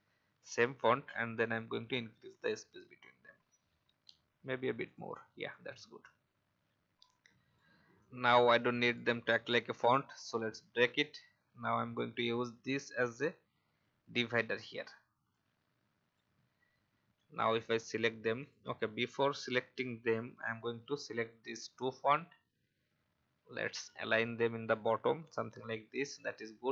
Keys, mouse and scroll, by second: 1.5-3.7 shift+scroll up 1, 4.8-7.6 drag, 8.8 right click, 9.7 click, 13.5-13.8 alt+scroll up 1, 15.3-20.7 alt+shift+drag, 21.1 shift+click, 23.7 click.